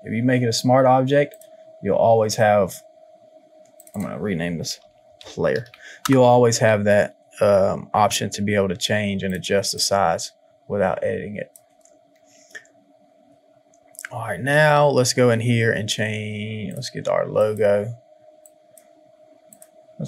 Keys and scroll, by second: 4.6 shift+p, 9.5 space.